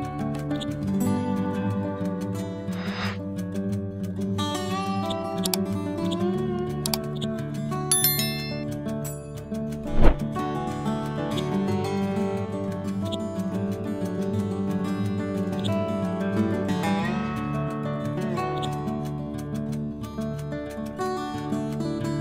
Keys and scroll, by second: 0.9 ctrl+z, 1.8 F12, 2.7 2, 7.8 F12, 9.6 2, 19.3 Up, 19.8 Left, 20.2 Up, 20.5 Right.